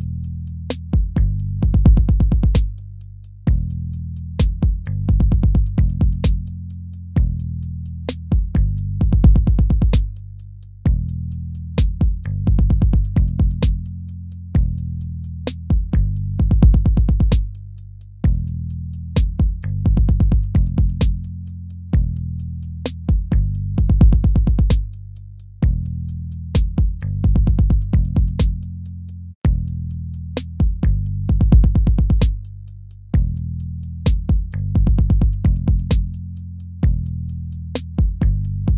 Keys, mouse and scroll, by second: 0.0 ctrl+z, 3.4 ctrl+-, 3.7 ctrl++, 17.9 ctrl+z, 20.3 ctrl+z, 20.8 ctrl+-, 22.3 ctrl+-, 26.4 ctrl++, 26.8 ctrl+-, 28.6 ctrl++, 29.9 ctrl+-, 32.2 ctrl++, 32.6 ctrl++, 35.8 ctrl+-, 36.7 ctrl+z, 37.4 ctrl++, 37.8 ctrl++, 38.1 ctrl++.